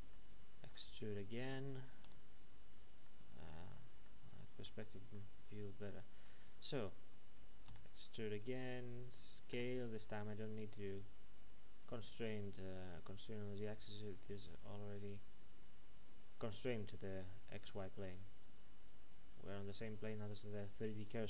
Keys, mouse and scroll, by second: 0.1 middle click, 2.7-3.0 scroll down 1, 3.0 middle click, 4.0 middle click, 7.7 e, 19.9 click, 20.6 middle click.